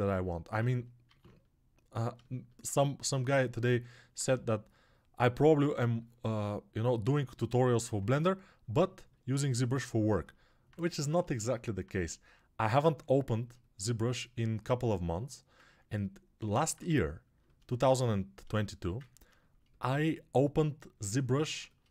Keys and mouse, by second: 1.0 alt+q, 2.4-4.0 alt+shift+right drag, 4.0-19.1 alt+drag, 4.2 2, 7.6 1, 19.1-21.9 alt+shift+right drag.